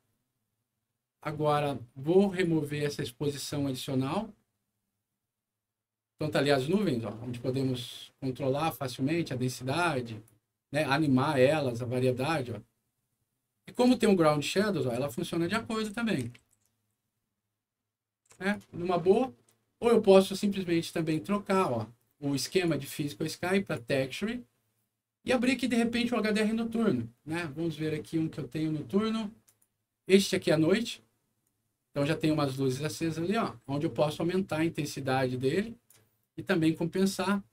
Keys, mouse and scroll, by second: 2.3 click, 3.4-6.7 drag, 8.7-10.2 drag, 11.0-13.8 drag, 14.5-18.5 right drag, 14.6-17.4 typing, 20.9 click, 21.5 click, 22.5 click, 23.5 click, 25.2 click, 29.4 click, 31.4 right click, 34.1-35.8 drag, 36.9-37.5 drag.